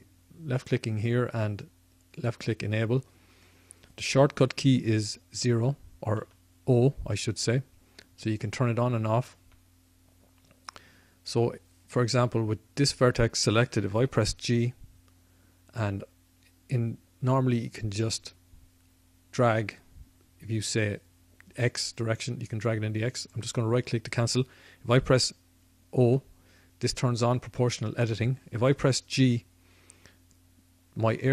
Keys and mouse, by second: 5.4 o, 6.1 o, 9.3 o, 10.6-12.7 middle drag, 14.1 g, 23.4-25.8 right drag, 25.8 o, 29.1 g.